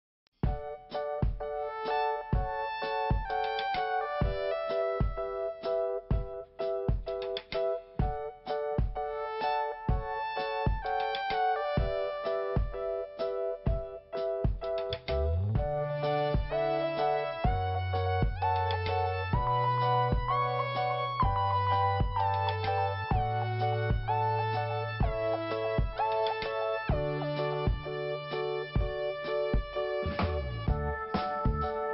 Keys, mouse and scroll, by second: 0.2 click, 0.2 5, 2.4-3.2 scroll up 1, 3.2 click, 5.1 click, 7.4 scroll up 1, 7.6 click, 8.1 scroll up 1, 8.2-8.5 scroll down 2, 10.1 scroll up 1, 13.2 click, 15.8 scroll down 1, 18.1 click, 24.9-25.2 scroll up 1, 26.3 scroll up 1, 26.4 click, 26.8 click, 26.9 double click, 27.4 scroll up 2, 28.0 click, 28.3 right click, 28.4 double right click, 29.3 click.